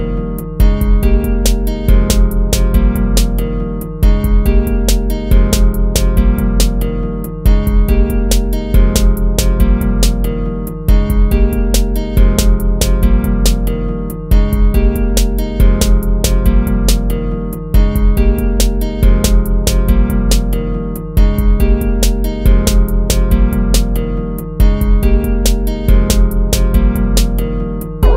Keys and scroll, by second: 7.9 ctrl+-, 9.0 ctrl+-, 9.1 ctrl++, 10.1 ctrl+-, 14.7 ctrl++, 16.6 ctrl+-, 16.9 ctrl++, 17.7 ctrl+-, 18.7 ctrl++, 19.6 ctrl+z, 25.3 ctrl+-, 27.9 ctrl+-, 28.0 ctrl++.